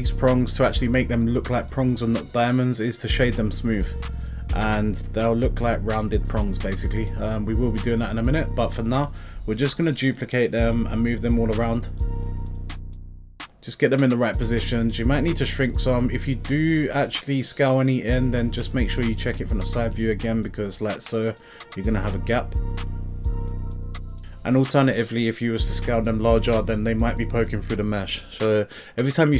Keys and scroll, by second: 3.6 x, 8.3 z, 15.8 s.